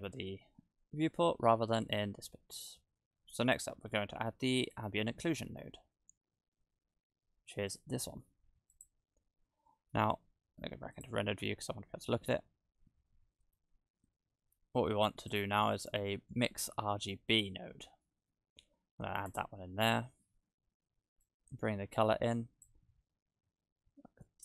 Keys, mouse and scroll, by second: 0.9-1.5 scroll up 1, 1.9 click, 2.8-4.6 scroll up 9, 4.6 click, 4.6 scroll up 1, 9.0 click, 9.7 middle click, 11.0 click, 12.6-13.4 scroll down 7, 13.6 shift+a, 21.2 click.